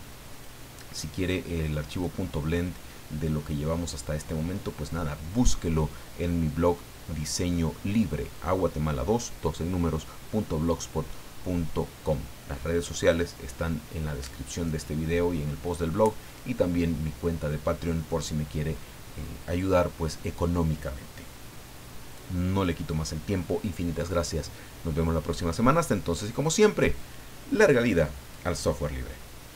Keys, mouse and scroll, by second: 0.3 click, 1.5 click, 26.9 click, 29.5 click.